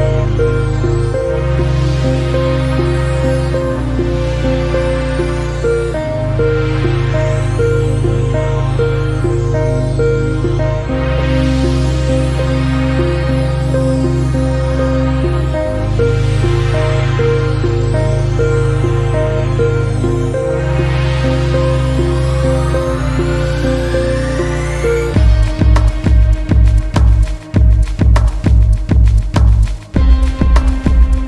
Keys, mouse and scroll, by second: 0.4 1, 0.7 click, 1.8 click, 2.6 g, 6.4 click, 7.1 g, 15.7 alt+z, 16.1 click, 17.4 alt+z, 18.0-18.5 scroll down 1, 18.5 g, 26.2 alt+click, 26.9 s.